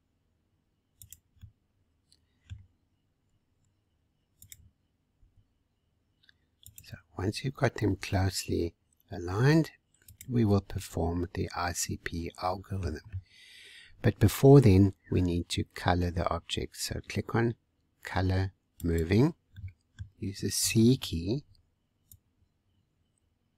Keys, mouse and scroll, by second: 1.4-3.2 middle drag, 3.2 r, 5.1 g, 7.2-7.8 scroll up 1, 7.8 g, 10.4-10.7 scroll down 3, 10.7-13.0 middle drag, 13.0 scroll up 1, 13.7 scroll up 2, 14.4 scroll down 2, 18.7 click, 19.5-20.6 middle drag, 20.6 c.